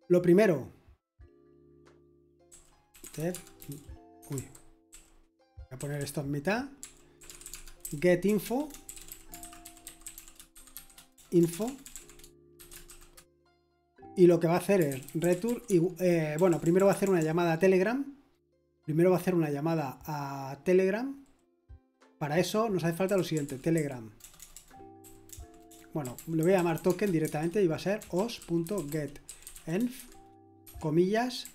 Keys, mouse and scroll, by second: 2.2-13.4 typing, 14.5-17.2 typing, 23.1-31.5 typing.